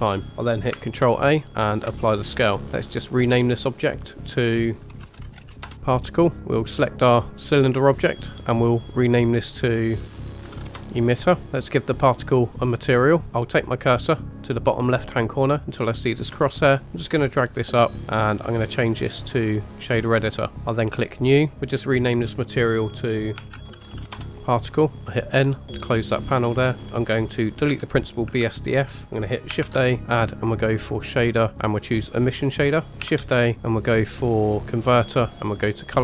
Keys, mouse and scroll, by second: 0.3-0.7 scroll down 4, 1.0 ctrl+a, 2.6-3.2 scroll down 1, 4.0 click, 4.2-5.6 drag, 6.4-6.9 scroll down 5, 7.1 click, 7.5-7.9 middle drag, 8.9-10.7 drag, 10.5 t, 11.4 click, 12.7 click, 16.1-17.2 drag, 18.7-19.8 drag, 20.9 click, 21.5-25.3 drag, 25.3 n, 25.8 middle click, 26.7 scroll up 2.